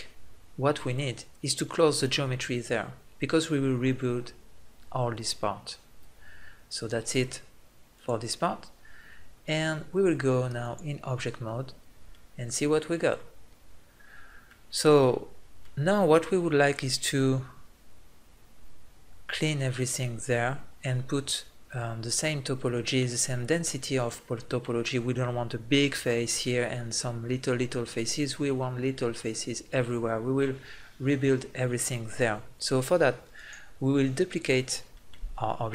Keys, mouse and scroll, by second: 0.1 f, 11.6 middle click, 14.3 middle click, 34.1 click.